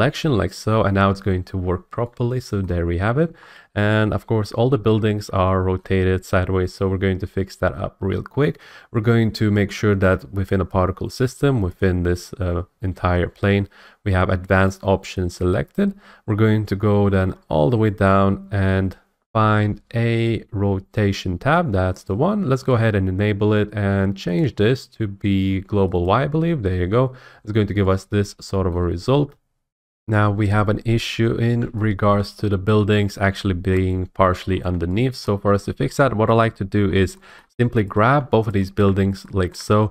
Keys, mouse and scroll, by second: 0.5 scroll, 3.4 middle click, 5.8 shift+middle click, 9.5-11.1 scroll, 11.8 click, 14.7 click, 17.1-19.3 middle drag, 17.1 scroll, 17.8-19.3 scroll, 19.3 F8, 19.9-21.8 middle drag, 19.9-20.7 scroll, 21.8 scroll, 22.1 click, 22.7 click, 24.4 click, 26.0 click, 27.4 scroll, 28.7-29.5 scroll, 29.7 F8, 31.1-31.6 scroll, 32.1 shift+middle click, 32.2 scroll, 32.9 scroll, 33.7-34.1 scroll, 34.5 middle click, 34.5 middle click, 35.2 middle click, 35.4 middle click, 35.7 middle click, 36.3 middle click, 36.7 scroll, 37.4 shift+middle click, 37.9 click.